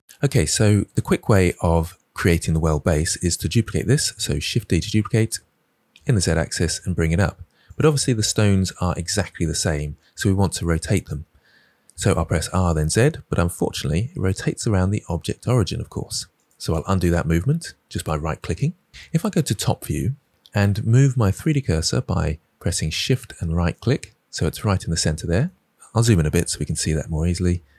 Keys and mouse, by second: 4.6 shift+d, 6.0 z, 12.2 r, 12.7 z, 16.3 click, 19.5 KP_7, 23.7 shift+click.